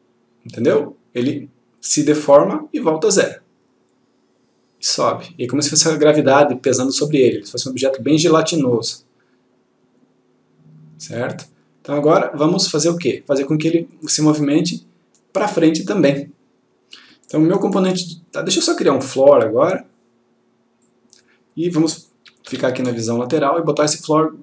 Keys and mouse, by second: 12.2 click, 19.3-20.2 click, 21.0 click.